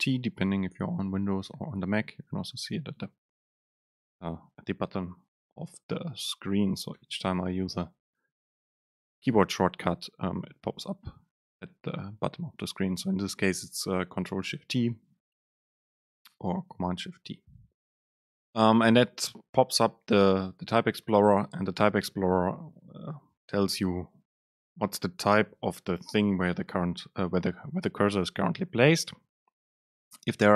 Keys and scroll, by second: 7.3 ctrl+shift+super+t.